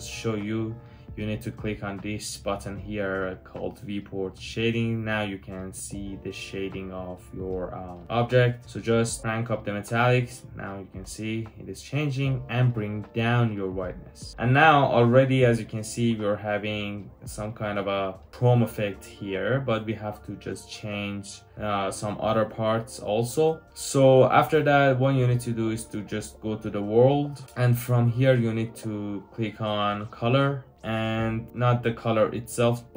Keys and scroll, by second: 8.0 typing, 17.0 Return.